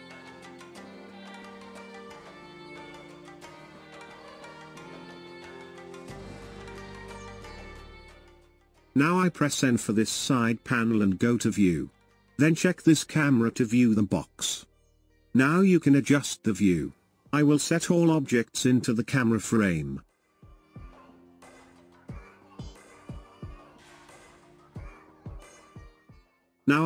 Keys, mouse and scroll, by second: 0.5-1.1 scroll down 2, 1.1-3.9 middle drag, 3.9 KP_0, 5.3-5.8 scroll up 2, 9.0 n, 10.9 click, 14.1 click, 19.1 shift+middle click, 24.0 shift+middle click, 25.0 shift+middle click, 26.1 click.